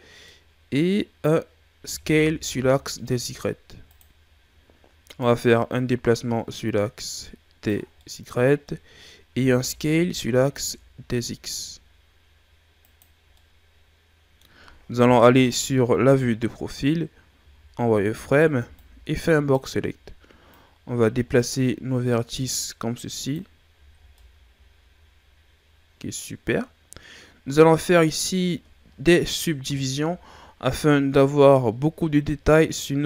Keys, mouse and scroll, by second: 1.2-1.8 scroll up 1, 1.8 s, 5.2 click, 8.0-9.2 middle drag, 9.2 s, 13.1 scroll down 4, 13.3-15.3 middle drag, 15.3 KP_3, 16.3 ctrl+scroll up 5, 17.0 scroll up 2, 17.4 z, 18.2 right click, 18.5 b, 20.5 click, 23.8 z, 24.0 scroll down 2, 24.2-27.1 middle drag, 29.6 KP_Divide.